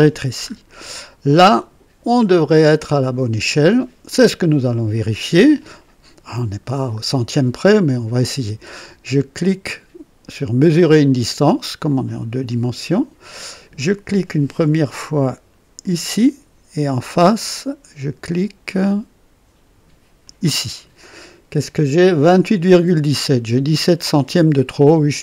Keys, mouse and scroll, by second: 0.3-0.6 scroll up 2, 1.1-2.1 scroll up 4, 2.5 right click, 12.0 click, 15.8 click, 20.2 click.